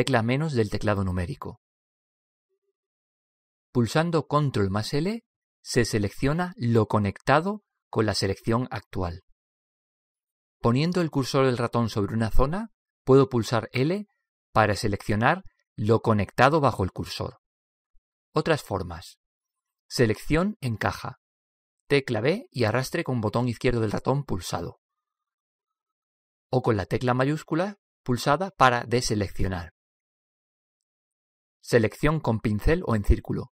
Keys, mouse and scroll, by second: 0.3 ctrl+KP_Subtract, 1.3 ctrl+KP_Subtract, 5.7 ctrl+l, 14.2 l, 18.5 l, 20.2 b, 22.7 b, 27.3 b, 32.4 c.